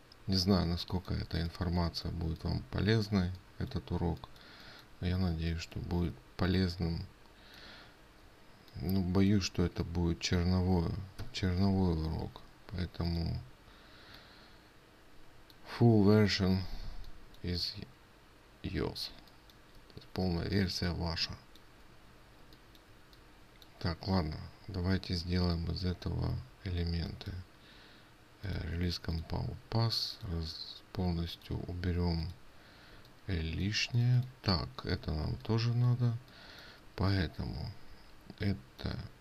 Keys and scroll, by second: 12.7 ctrl+z.